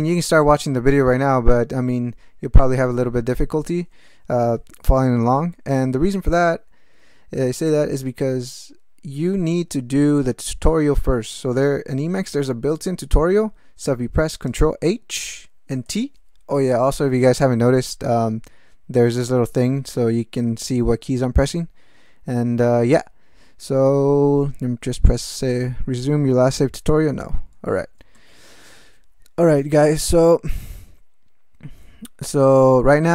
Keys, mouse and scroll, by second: 14.5 ctrl+h, 15.9 t, 27.2 n, 28.1 alt+shift+,.